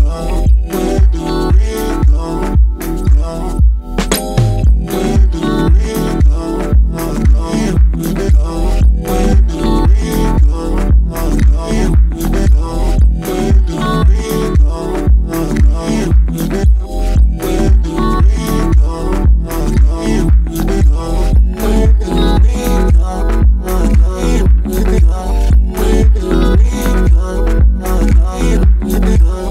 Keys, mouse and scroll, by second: 0.0-1.2 middle drag, 1.2-7.6 drag, 8.3 g, 13.7 i, 16.8-17.4 drag, 17.4 space, 26.1 space, 27.6 click, 27.8-28.7 right drag, 28.7 click.